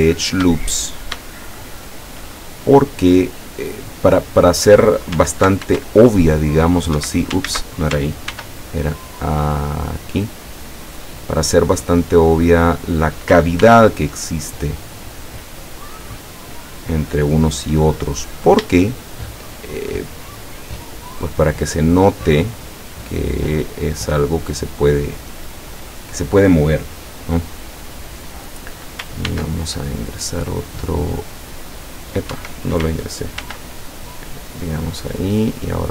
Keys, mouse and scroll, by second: 0.0-0.5 scroll up 1, 0.9 shift+scroll down 1, 1.3-2.4 shift+middle drag, 5.7 ctrl+r, 6.3 click, 7.0 Escape, 7.5 ctrl+z, 8.4 ctrl+r, 10.1 click, 12.7 click, 13.7 ctrl+r, 14.6 click, 17.1 click, 17.7-18.2 scroll up 2, 18.9-20.1 shift+middle drag, 21.5-25.3 drag, 25.7 click, 29.3 ctrl+r, 31.1 click, 32.4 Escape, 33.5 ctrl+r, 34.8 click.